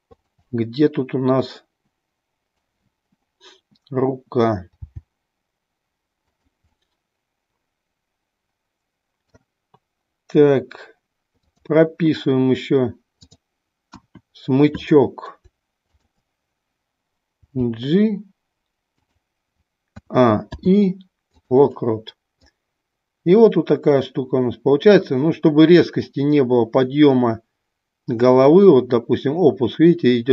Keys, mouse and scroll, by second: 0.5-2.7 middle drag, 6.8-8.1 middle drag, 8.2 scroll up 1, 8.3-9.5 middle drag, 11.5 click, 13.1 click, 19.2 click, 20.2 a, 22.6-30.3 drag.